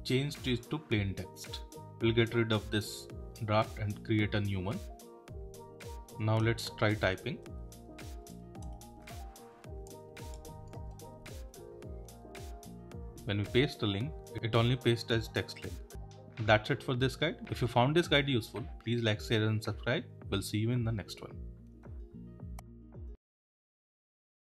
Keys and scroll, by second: 1.9 super+w, 13.1 Return, 14.2 super+v.